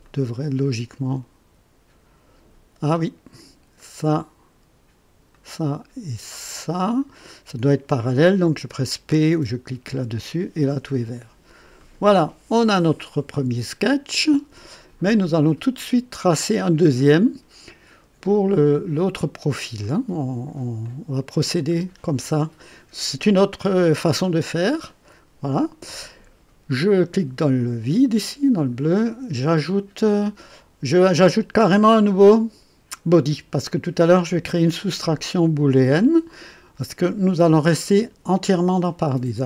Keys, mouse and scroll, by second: 0.0-3.4 drag, 3.7 click, 5.3 click, 6.8 click, 9.9 p, 11.7 click, 13.0-14.8 drag, 15.1 click, 15.9 click, 17.0-18.1 drag, 19.8 click, 20.8 click, 26.7 click.